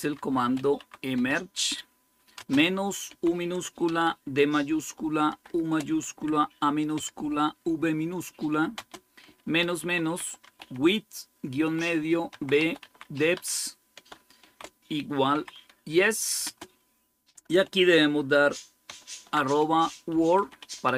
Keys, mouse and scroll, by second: 0.0-3.7 typing, 5.1-6.8 typing, 8.6-15.2 typing, 16.3 typing, 18.7 typing, 19.8-20.9 typing.